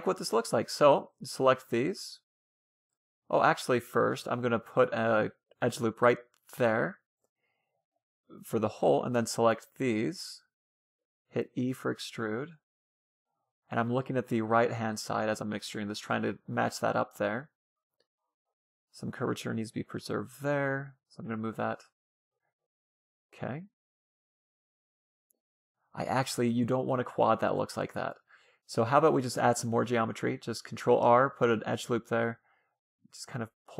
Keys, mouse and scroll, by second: 0.0 c, 1.2-2.2 middle drag, 1.5 c, 2.2-3.8 right drag, 3.1 a, 3.8 middle click, 4.0 ctrl+r, 7.7 a, 8.0 c, 9.9-11.6 right drag, 10.4 e, 14.6-16.8 middle drag, 16.8-18.2 right drag, 17.0 g, 18.8-20.3 right drag, 19.0 g, 20.6-22.1 right drag, 20.6 g, 22.4-27.8 middle drag, 22.4-24.0 scroll up 1, 22.7 a, 23.0 c, 26.8 ctrl+z, 29.1 ctrl+r, 30.4-32.4 middle drag, 31.1 a, 31.3 c, 32.2 g, 33.3 a, 33.5 c.